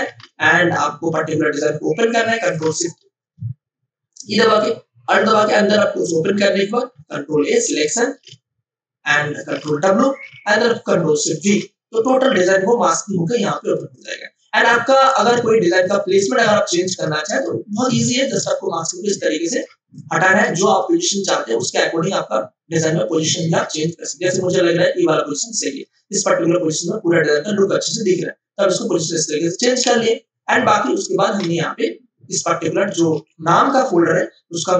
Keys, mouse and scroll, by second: 0.0 ctrl+o, 2.3 click, 6.9 ctrl+a, 8.1 ctrl+c, 8.1 ctrl+w, 9.5 ctrl+w, 11.3 ctrl+alt+shift+v, 13.7 space, 13.9 click, 14.3 space, 15.3 ctrl+space, 15.6-17.8 ctrl+alt+drag, 17.8 ctrl+t, 18.5-28.6 drag, 28.6-31.2 drag, 31.2 Return, 33.5-34.7 drag, 33.5 v.